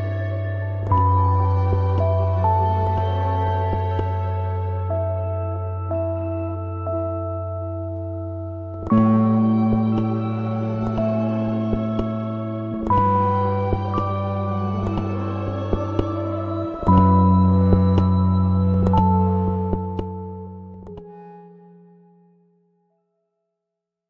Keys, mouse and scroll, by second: 6.9 ctrl+d, 7.1-11.5 drag, 11.5 ctrl+d, 11.6-15.5 drag, 15.5 ctrl+scroll down 1, 16.1 click, 16.6 ctrl+scroll down 1, 19.1 space, 19.3 click, 19.5 space, 20.0 z, 20.5-22.0 drag, 22.0 v, 22.2 click.